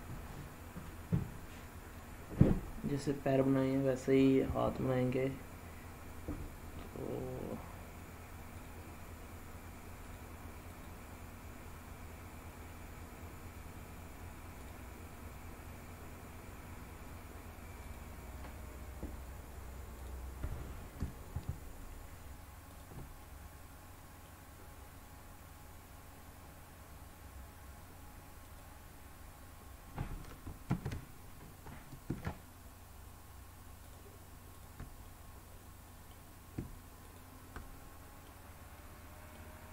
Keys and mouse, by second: 2.5-3.6 drag, 2.5-3.6 right drag, 10.0 click, 14.5 click, 17.7 click, 19.9 click, 22.6 shift+click, 23.2-24.2 middle drag, 28.4 click, 30.6 ctrl+z, 33.8 shift+click, 35.0-36.0 middle drag, 37.0 shift+click, 37.6 middle click, 38.7 middle click.